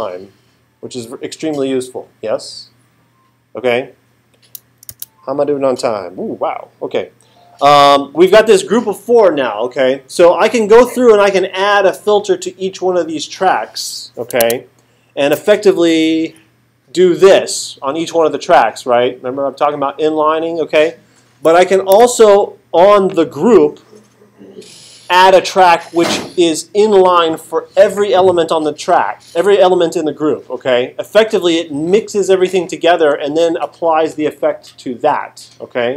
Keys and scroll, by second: 4.9 alt+super+8, 14.4 super+Tab, 16.2 super+Right, 21.9 Right.